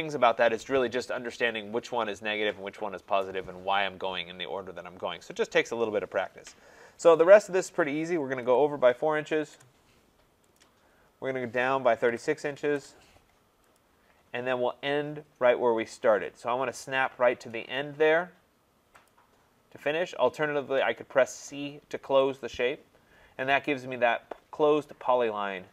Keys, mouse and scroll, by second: 8.4-9.8 typing, 10.6 click, 11.7-12.4 typing, 12.7 Return, 13.8 click, 19.1 click, 22.4 click.